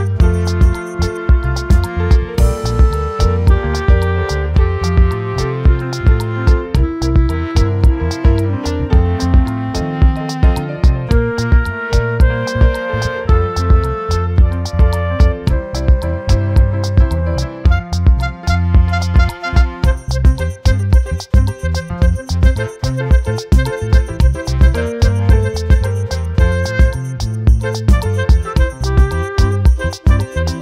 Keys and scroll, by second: 30.0 ctrl+t.